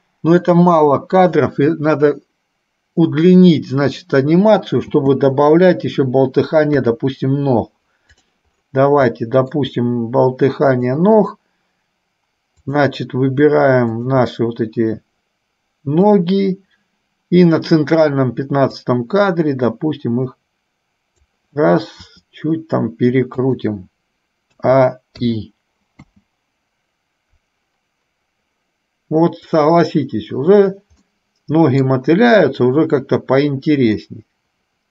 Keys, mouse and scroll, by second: 5.0 space, 6.9 KP_3, 9.3 shift+middle click, 10.9 click, 12.7 click, 16.2 click, 19.2-21.7 drag, 22.2 r, 24.7 a, 26.3 space, 31.2 middle click, 34.2-34.9 middle drag.